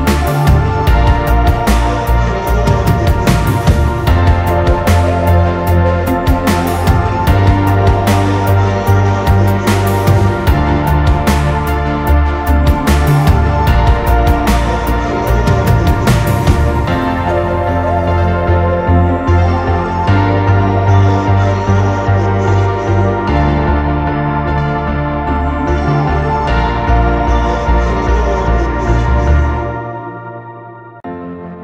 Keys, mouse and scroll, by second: 0.0 Right, 0.5 Return, 1.1 Down, 1.5 Down, 2.7 ctrl+t, 4.5 Return, 4.8 Right, 5.1 Right, 5.3 Down, 5.5 Down, 5.7 Down, 5.9 Down, 6.2 Down, 7.5 Down, 7.7 Down, 7.9 Down, 8.2 Down, 8.6 Down, 9.0 Right, 10.0 ctrl+-, 10.2 ctrl+-, 10.4 ctrl+-, 10.5 ctrl+-, 10.8 ctrl+-, 28.1-28.4 alt+scroll up 1, 28.7-29.3 alt+scroll down 1.